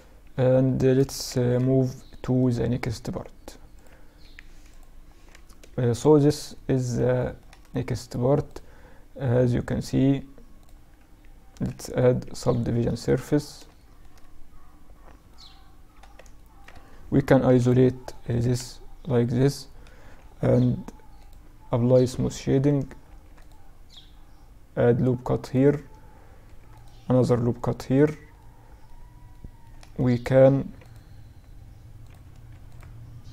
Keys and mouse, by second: 4.9-6.6 middle drag, 6.6-7.9 right drag, 11.2 ctrl+2, 11.8-19.6 middle drag, 16.5 KP_Divide, 19.9 t, 20.2-22.1 drag, 20.4 t, 21.4 Tab, 22.1 ctrl+r, 25.5 ctrl+r, 27.4-30.1 middle drag, 29.5 ctrl+r, 31.5 ctrl+r.